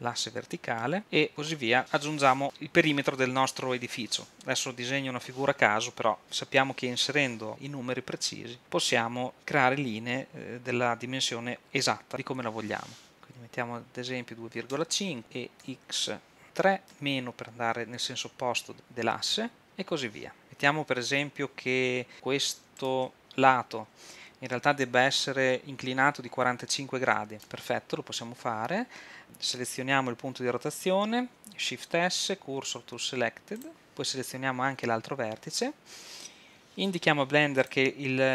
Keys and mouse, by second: 15.2 e, 19.6 e, 22.8 click, 27.4-29.2 drag, 31.7 shift+s, 35.1-36.7 drag.